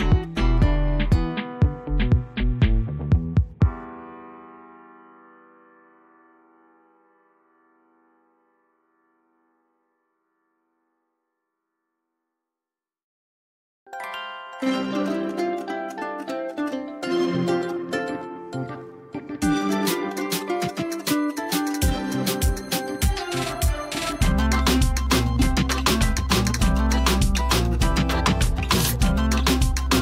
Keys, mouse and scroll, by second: 0.4 alt+click, 1.6 alt+click, 2.3-2.6 click, 3.5 ctrl+z, 4.3 alt+click, 5.6 space, 5.8 click, 6.1-6.5 space, 7.1-8.8 alt+drag, 11.7 space, 11.9 right click, 12.1 click, 13.1 ctrl+alt+z, 13.5-14.2 typing, 14.3 right click, 14.5 click, 16.1-17.3 typing, 17.6 alt+t, 19.0 click, 29.7 space, 29.9 right click.